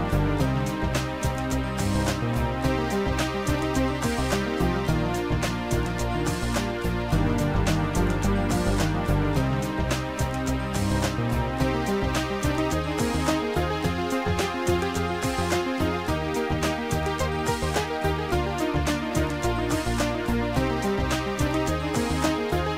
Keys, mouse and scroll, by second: 3.6 click, 5.1 click, 8.0 click, 8.5 click, 9.1 click, 10.2 click, 13.0 click, 14.5 Delete, 15.6 click, 17.4 Delete, 17.4 click, 19.2 click, 19.3 Delete, 21.7 click, 22.5 click.